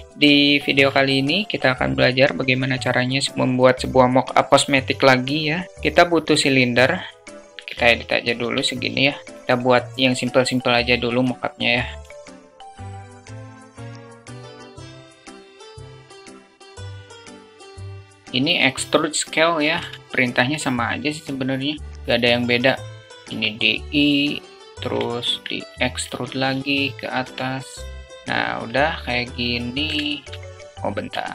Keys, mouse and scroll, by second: 0.1-0.5 alt+shift+middle drag, 0.6 alt+shift+middle click, 5.7 shift+a, 7.5 Tab, 7.5 alt+z, 7.7 alt+z, 8.2 Tab, 11.8-14.7 typing, 12.7 alt+shift+click, 15.2 alt+shift+click, 15.7 click, 16.2 i, 17.2 s, 17.7 e, 19.5 `, 21.9 e, 23.0 i, 24.8 click, 25.7 alt+click, 26.0 click, 27.0 e, 27.9 `, 29.8 alt+shift+click, 31.0 alt+middle click.